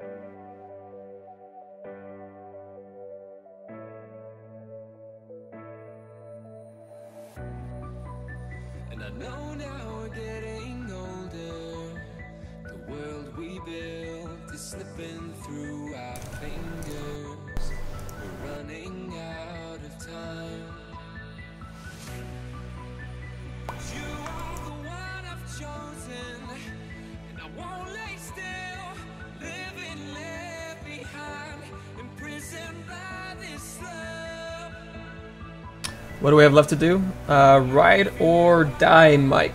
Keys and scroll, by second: 3.6 F1, 20.4 c.